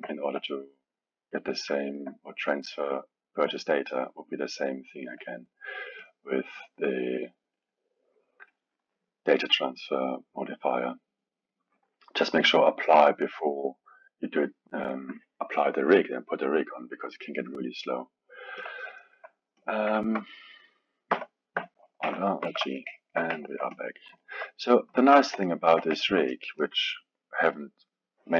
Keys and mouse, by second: 6.0 click, 7.5 click, 8.5-11.6 drag, 18.6 click, 19.0-19.5 alt+middle drag, 19.5 click, 20.0 ctrl+Tab, 23.9 click, 24.0 click, 24.2-28.3 alt+middle drag.